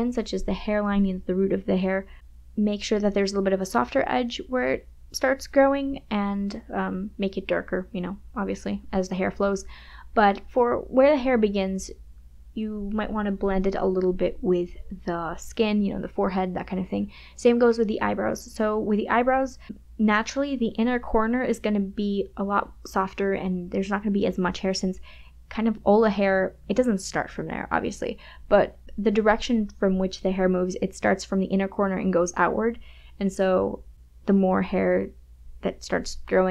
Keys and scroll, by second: 1.9 KP_Subtract, 7.7 space, 15.1 space, 18.0 ], 21.5 KP_Subtract, 21.7 KP_Add, 23.1 KP_Subtract, 23.7 KP_Add, 25.8 KP_Add, 25.9 space, 31.6 KP_Subtract, 31.8 KP_Add, 33.3 KP_Subtract, 33.7 KP_Add, 34.7 ].